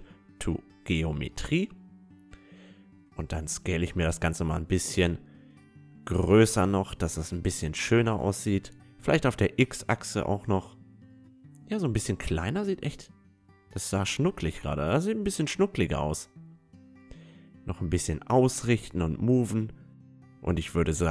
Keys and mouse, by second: 0.4-3.3 middle drag, 0.8 s, 3.7 s, 5.3-12.3 middle drag, 6.5 s, 10.5 s, 12.8 s, 14.6 s, 16.0-17.9 drag, 17.2 a, 17.5 Tab, 17.7 Tab, 18.0 a, 18.3-21.0 middle drag, 18.8 a.